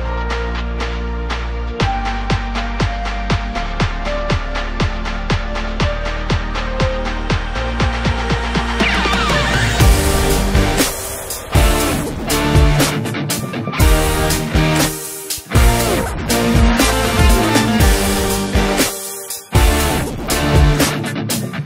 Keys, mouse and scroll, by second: 0.0-2.9 middle drag, 2.9-3.5 scroll up 3, 3.5 Tab, 3.9 middle click, 4.6-6.2 scroll up 3, 6.2-6.6 scroll down 1, 6.6 2, 7.5 click, 10.5 click, 10.7 click, 12.5-13.4 scroll down 2, 13.4 shift+s, 15.4-16.0 scroll up 2, 16.0 Tab, 16.3-16.9 scroll down 2, 16.9 KP_1, 18.4-21.0 drag, 21.0 s.